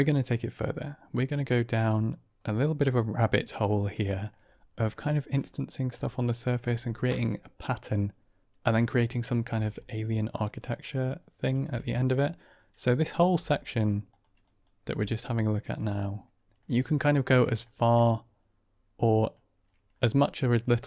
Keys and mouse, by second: 4.0 shift+middle drag, 4.4-5.8 middle drag, 6.0 middle click, 9.4 ctrl+space, 11.1-11.5 drag, 11.5 g, 12.8 drag, 13.2 g, 14.3 click, 14.8 g, 16.4 middle click, 17.5-17.8 shift+middle drag, 17.9-19.2 middle drag.